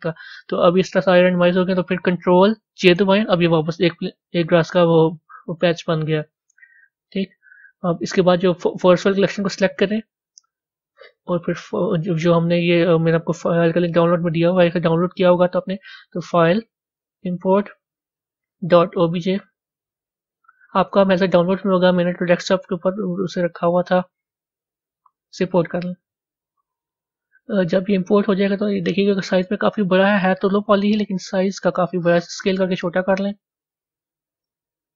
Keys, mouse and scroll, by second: 0.3-2.6 middle drag, 2.6 ctrl+j, 7.3 click, 8.3 click, 10.1 click, 10.8 click, 16.1-19.7 drag, 26.6 click, 27.7-29.5 scroll down 24, 29.5-30.0 scroll down 2, 30.7 s, 32.2-32.6 scroll up 4, 33.4-34.9 middle drag.